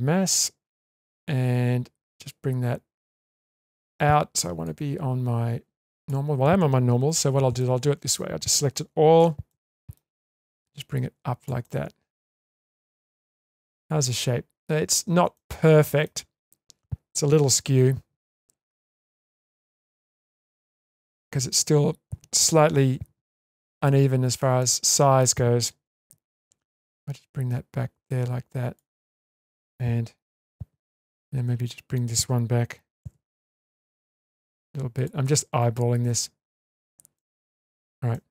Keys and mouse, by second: 0.7 shift+middle drag, 2.1-2.9 middle drag, 3.1-3.9 shift+middle drag, 4.7-6.1 drag, 7.1 Tab, 7.6-8.1 middle drag, 9.2 a, 9.5-9.9 middle drag, 10.5 click, 11.6-13.4 middle drag, 13.6 Tab, 14.9 Tab, 15.3 middle click, 17.7 2, 19.1-21.5 middle drag, 22.9 2, 24.6 middle click, 26.7 click, 26.9-28.8 drag, 29.2 middle click, 30.4 1, 31.0 click, 33.0 g, 34.9 click, 35.3 g, 37.2-37.6 middle drag, 37.7 Tab, 38.1-38.3 middle drag.